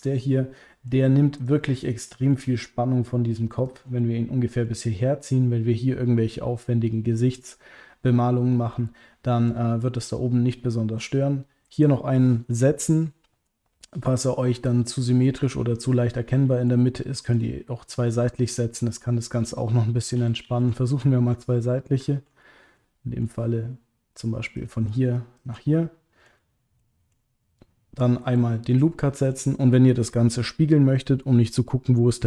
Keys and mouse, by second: 0.0 middle click, 1.4 click, 1.7 middle click, 4.0 middle click, 8.8 middle click, 10.5 middle click, 13.4 middle click, 16.3 middle click, 17.3 click, 18.2 middle click, 20.1 ctrl+z, 20.4 ctrl+z, 22.4 middle click, 25.7 middle click, 26.8 middle click, 28.7 middle click.